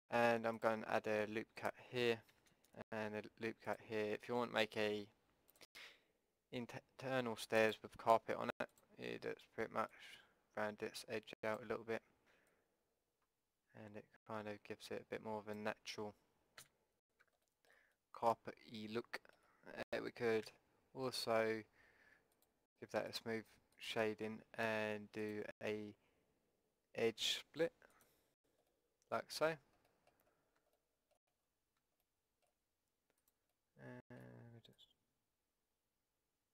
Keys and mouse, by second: 0.0 ctrl+r, 2.3 a, 3.0 ctrl+r, 7.6-11.9 drag, 12.5-14.5 drag, 16.7 a, 16.8-18.2 middle drag, 20.4 a, 22.4-27.3 drag, 28.7-30.3 drag, 29.5 a, 33.2-36.4 middle drag, 36.4 click.